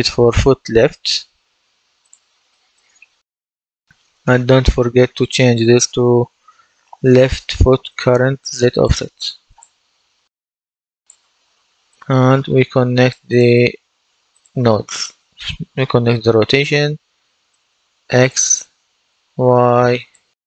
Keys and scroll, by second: 0.0-1.2 typing, 6.0 Delete.